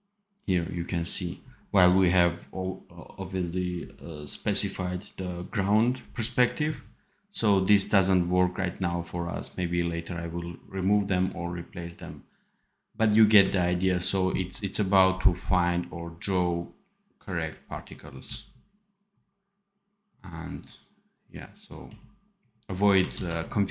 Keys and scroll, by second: 13.7 ctrl+b, 18.1 c, 21.8 c, 23.1 ctrl+s.